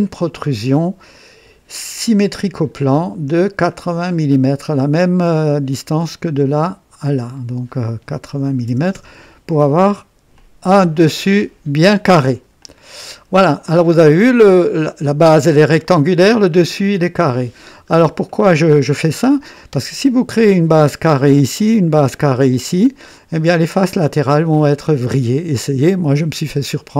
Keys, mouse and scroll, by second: 2.5 click, 3.7 click, 8.3-9.1 typing, 8.9 KP_Enter, 10.4-11.3 drag, 12.6-18.1 drag, 18.3-19.1 right drag, 22.5-23.5 drag, 26.2-26.9 drag.